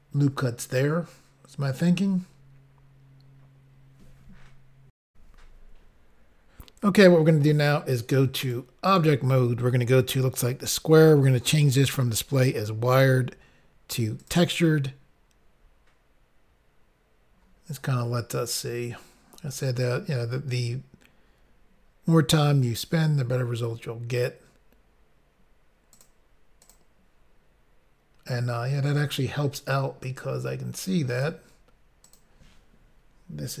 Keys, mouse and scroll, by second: 5.1 Insert, 6.2 Pause, 8.4 click, 8.9 click, 12.9 click, 14.2 click, 25.9 click, 26.0 click, 26.6 click, 26.7 click, 28.6 scroll up 1, 31.2 click, 31.2 click, 32.0 click, 32.2 click.